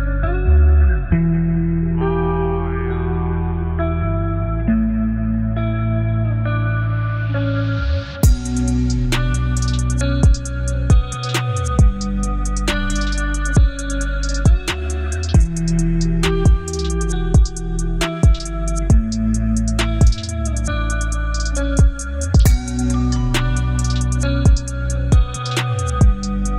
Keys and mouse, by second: 0.7 shift+middle click, 2.4 click, 5.0 click, 5.8-6.4 drag, 8.9 space, 10.5 drag, 10.5 space, 11.1 space, 13.6 space, 15.4 click, 16.7 click, 18.0 click, 19.5-20.6 drag, 20.7-22.6 drag, 21.9 KP_0, 22.9 click, 25.5 click.